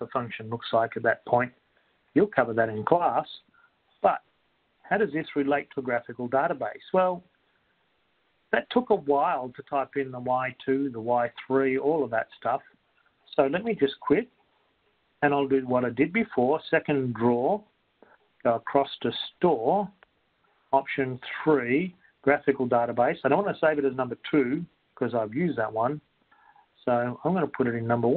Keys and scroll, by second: 19.4 Right, 22.2 3, 27.5 3.